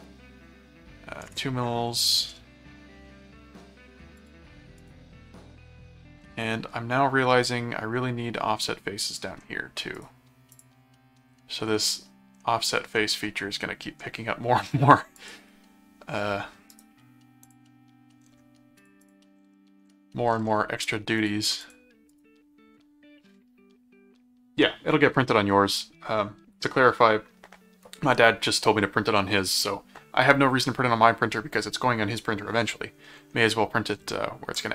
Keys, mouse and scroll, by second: 2.4 middle click, 4.1 click, 4.9 right click, 6.3 middle click, 7.3 middle click, 10.0 right click, 10.5 click, 12.4 middle click, 13.2 middle click, 15.2 click, 16.7 right click, 17.4 click, 18.8 click, 21.2 click, 22.1 right click, 34.5 click.